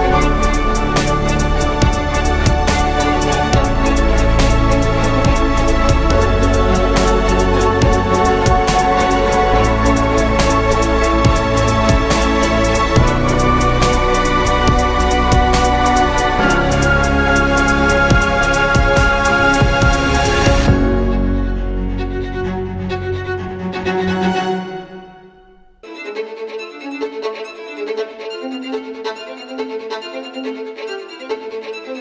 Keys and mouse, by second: 1.3 s, 3.3 Tab, 3.9 ctrl+Tab, 5.2 ctrl+b, 6.3 Tab, 6.7 ctrl+a, 7.1 Tab, 7.6 ctrl+b, 10.0 Tab, 15.1 ctrl+KP_1, 15.7 z, 22.5 KP_3, 26.7 shift+a, 27.8 s, 28.4 s, 29.0 s, 29.9 KP_1, 31.1 r.